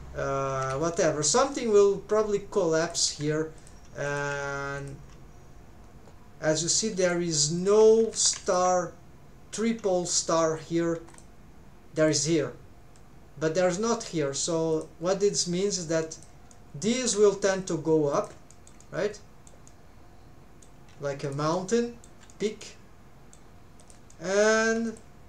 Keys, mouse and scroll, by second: 17.4 click.